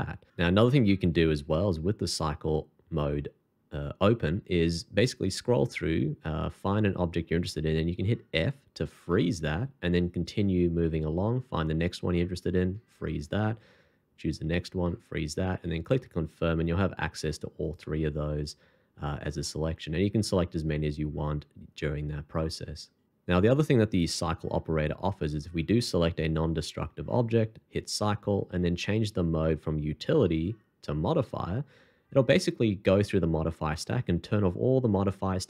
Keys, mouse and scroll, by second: 1.3 shift+2, 4.7 scroll up 1, 9.1 f, 14.1-14.8 scroll up 1, 16.6 g, 17.6 right click, 19.4 middle click, 27.0 shift+2, 30.2 r.